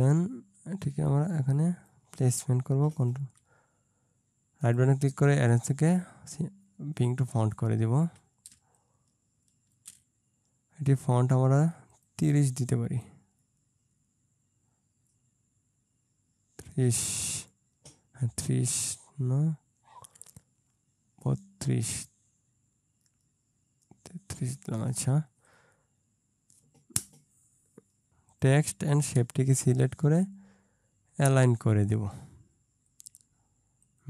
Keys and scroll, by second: 8.6 ctrl+space.